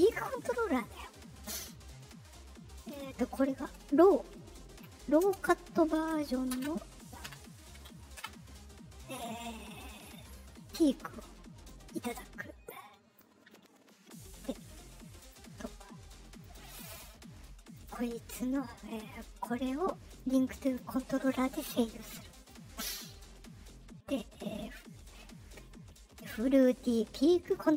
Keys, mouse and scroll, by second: 0.0 click, 1.9 middle click, 1.9 scroll down 1, 2.7 click, 4.4 Right, 5.2 space, 11.6-13.1 drag, 15.1 click, 16.3 click, 17.7 click, 19.0 right click, 20.6 click, 22.3 click.